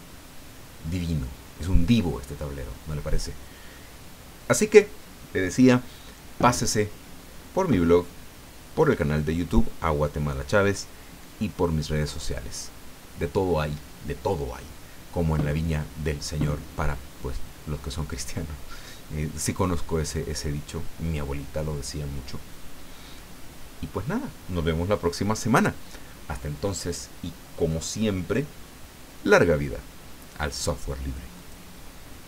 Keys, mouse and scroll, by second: 31.4 click, 32.2 click.